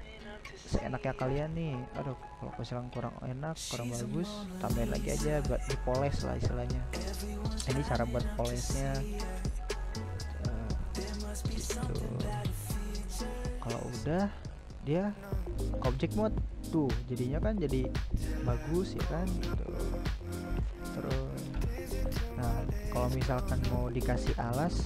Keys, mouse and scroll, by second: 1.2 ctrl+r, 3.7-5.3 middle drag, 5.3 ctrl+r, 7.2-10.8 middle drag, 10.8-12.7 drag, 12.7-13.2 middle drag, 13.2 right drag, 13.5-14.6 middle drag, 14.6 scroll down 1, 14.8-15.4 middle drag, 15.4-15.7 scroll down 1, 15.7 middle click, 16.2-16.7 scroll down 2, 16.7-21.9 middle drag, 21.9-24.8 drag.